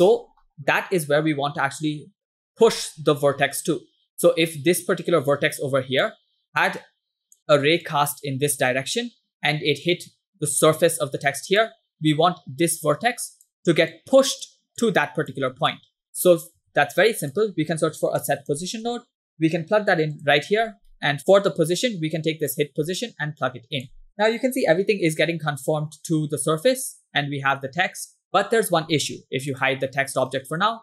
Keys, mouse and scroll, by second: 0.1 scroll down 2, 0.4-1.4 middle drag, 2.4 middle click, 3.7-4.5 scroll up 2, 4.6-6.2 drag, 6.7 click, 7.9 click, 9.9-11.7 drag, 12.8 click, 14.0 click, 14.9 click, 15.7 ctrl+click, 16.7 shift+a, 21.0 middle click, 22.5-24.1 drag, 24.9-25.9 scroll down 2, 26.0-28.3 middle drag, 29.6 click, 30.3 middle click, 30.7 scroll up 2.